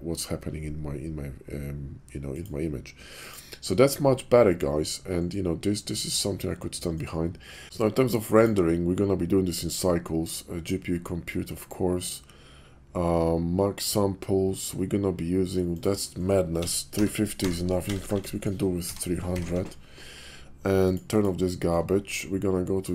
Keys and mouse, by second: 8.2 click, 15.8-19.4 drag, 17.8 BackSpace, 19.4 BackSpace, 19.4 0.